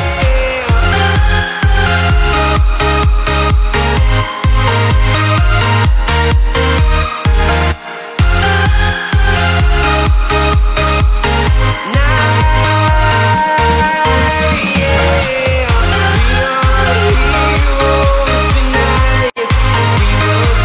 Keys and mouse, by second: 2.7 click.